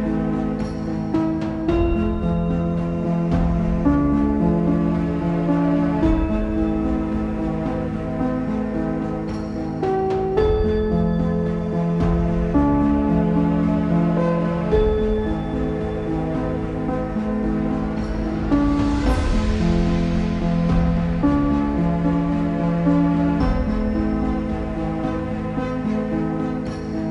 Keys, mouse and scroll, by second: 0.8 shift+d, 3.2-6.3 drag, 6.7-7.2 scroll up 2, 7.2 click, 8.4-11.0 drag, 13.1 click, 15.4 click, 16.2 click, 23.3 click, 24.7 z, 25.7 middle click, 26.1 ctrl+s, 26.5-27.1 shift+middle drag.